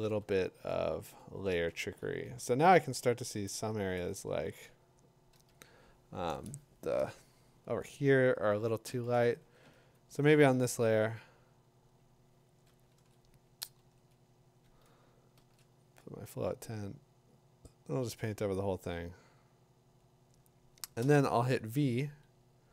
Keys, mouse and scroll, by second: 0.1 b, 2.1 Escape, 3.5 alt+click, 8.8-10.3 typing, 13.0 ctrl+z, 13.8 ctrl+z, 15.4 shift+1, 21.0 v.